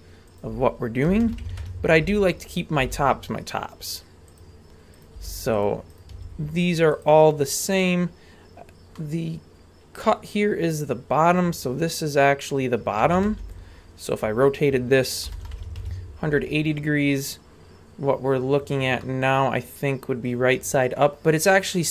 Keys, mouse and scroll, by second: 1.1 r, 2.5 right click, 2.8 g, 4.9 right click, 5.1 g, 5.9 right click, 6.1 g, 7.5-8.4 scroll up 1, 8.4-8.9 scroll up 2, 8.9-10.1 middle drag, 13.0 a, 13.3 b, 15.3 r, 19.0-21.8 middle drag.